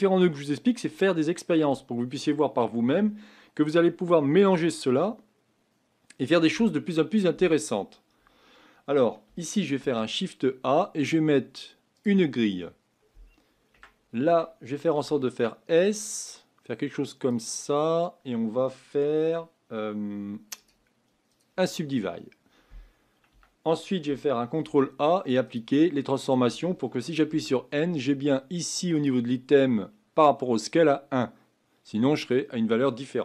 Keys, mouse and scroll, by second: 9.8 shift+a, 12.5 scroll up 7, 13.7 Tab, 14.9 s, 17.7-18.0 scroll down 4, 20.5-23.3 right drag, 23.3 Tab, 24.6 ctrl+a, 27.3 n, 28.9 click.